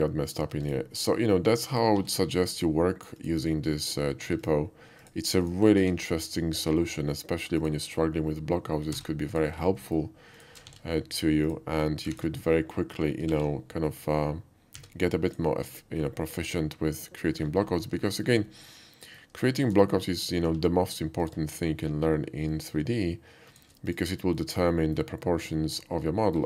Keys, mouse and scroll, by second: 0.4 click, 0.5 x, 0.7 click, 1.7 click, 3.2 click, 3.8 click, 4.4 click, 5.0 click, 5.4 click, 5.8 q, 7.6 click, 9.1 s, 9.3 click, 9.9 middle drag, 10.4 shift+click, 10.7 alt+x, 11.5-12.1 drag, 12.2 ctrl+z, 13.3 alt+x, 14.8 x, 15.8 click, 16.0-17.4 middle drag, 18.1 middle click, 18.7-19.2 shift+middle drag, 19.5 shift+middle click, 20.3 shift+click, 20.5 q, 21.2 click, 23.5 shift+click, 23.9 shift+click, 24.4-25.0 shift+middle drag, 25.9-26.4 shift+middle drag.